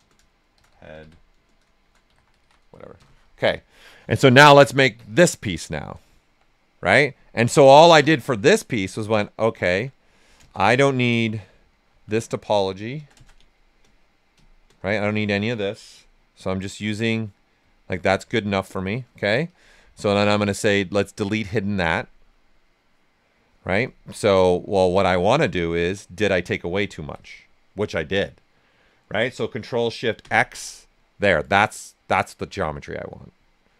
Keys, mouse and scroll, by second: 0.0-2.9 typing, 4.3-5.0 typing, 5.0 click, 6.2 shift+f, 7.6 click, 8.0 alt+right click, 8.7 right click, 10.7-12.9 ctrl+shift+drag, 12.9 ctrl+shift+click, 13.3 shift+space, 14.3 space, 17.1 right click, 17.9 typing, 19.4-23.1 drag, 24.8 click, 24.8 typing, 25.6 ctrl+right click, 27.2-30.2 shift+right drag, 30.2 ctrl+shift+x, 30.9-33.4 right drag.